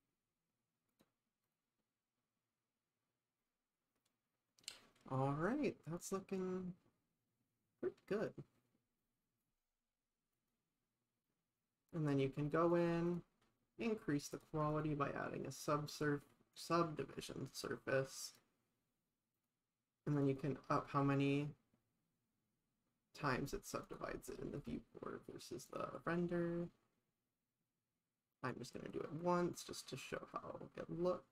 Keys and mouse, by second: 1.2 drag, 1.5 click, 10.4 click, 12.9 click, 13.1 click, 14.3 click, 14.8-17.5 drag, 18.3 click, 19.4-23.2 drag, 23.9 click, 24.7-29.6 drag.